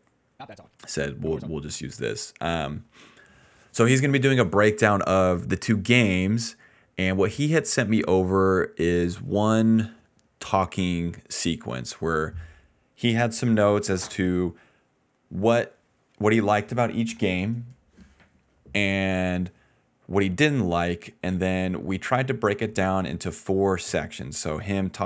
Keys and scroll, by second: 0.3 space, 0.7 space, 0.9 space, 1.4 space, 7.7 t, 8.0 Return.